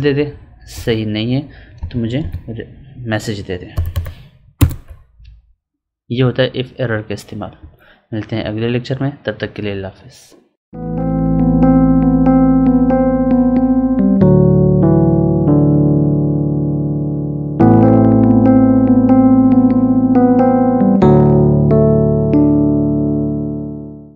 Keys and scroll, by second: 0.7 Up, 7.5 Up.